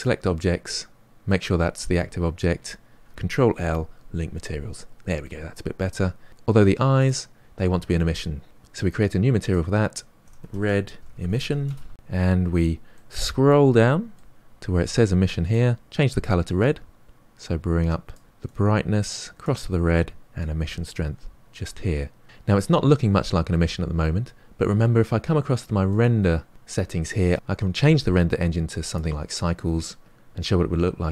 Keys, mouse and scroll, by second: 0.0-4.4 right drag, 4.4 ctrl+l, 5.2 middle click, 6.1-7.0 scroll up 3, 7.0 click, 9.4-11.3 drag, 11.3 s, 16.6 click, 20.5-22.2 drag, 22.8-28.8 middle drag, 28.8 click.